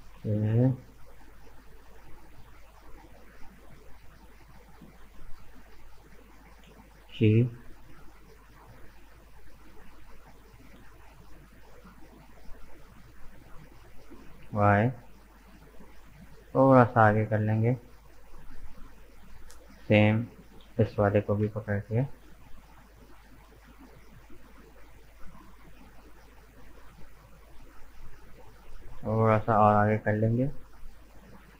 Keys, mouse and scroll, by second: 1.9 shift+right click, 2.7 shift+right click, 3.3 shift+right click, 4.5 shift+right click, 5.0-6.8 middle drag, 6.8 g, 14.2-17.3 middle drag, 18.2 right click, 18.5-19.6 middle drag, 19.6 shift+right click, 20.3 shift+right click, 21.1 ctrl+z, 21.8 shift+right click, 22.3 shift+right click, 22.9 shift+right click, 23.9-24.6 scroll up 1, 24.6 shift+middle click, 25.5 shift+right click, 25.9 middle click, 26.7 shift+right click, 27.1-27.7 scroll down 1, 27.7-29.3 middle drag, 29.3 g.